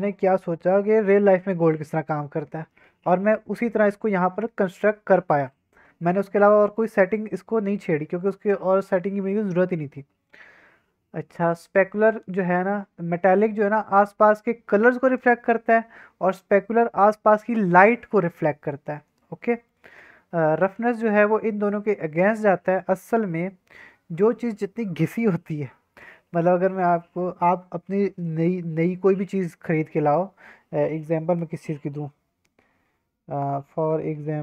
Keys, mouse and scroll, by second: 6.7 middle click, 6.9-9.8 scroll down 1, 13.5-14.5 middle drag, 14.5-15.4 drag, 15.4 middle click, 16.9-17.3 drag, 17.3-18.3 middle drag, 18.4-19.4 scroll up 2, 19.4 middle drag.